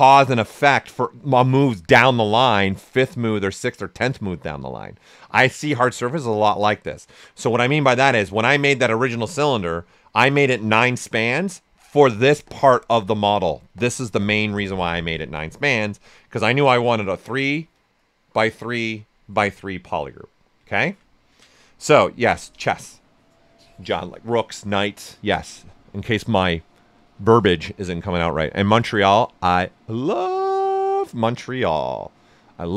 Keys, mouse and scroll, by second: 9.5-15.5 drag, 9.5 typing, 15.5-18.8 drag, 18.8 right click.